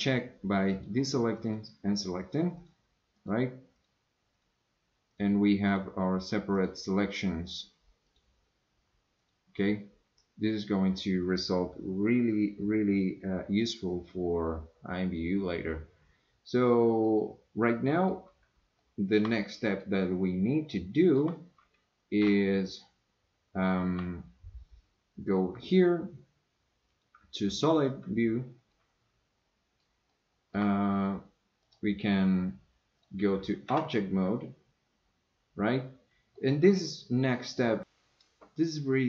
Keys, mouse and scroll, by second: 0.7 click, 1.4 click, 2.6 click, 3.2 click, 3.8-4.4 drag, 5.1 click, 5.7 click, 7.5 drag, 9.2 click, 17.0-18.1 middle drag, 18.8 shift+middle click, 19.4 middle click, 20.7 shift+middle click, 22.3 Tab, 23.9 Tab, 26.9 click, 28.7-29.8 middle drag, 30.1 shift+middle click, 31.6 click, 33.7 Tab, 36.3-37.6 middle drag.